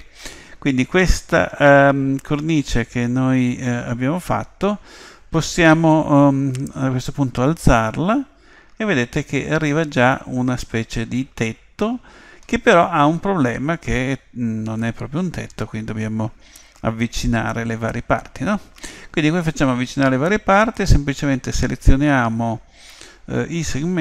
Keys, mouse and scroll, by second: 7.0 click, 10.2-11.9 middle drag, 14.8-16.7 middle drag.